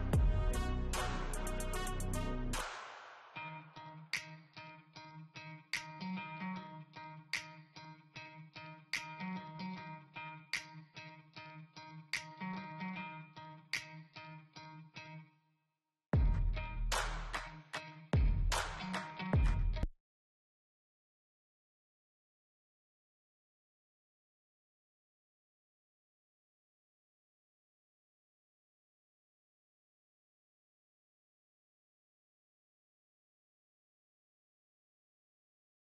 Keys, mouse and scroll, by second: 4.5 scroll down 1, 5.4 scroll up 1, 6.1 scroll down 1, 6.5 scroll up 1, 7.9 scroll down 1, 10.7 scroll down 1, 16.3-17.8 scroll up 1, 26.2 scroll down 1.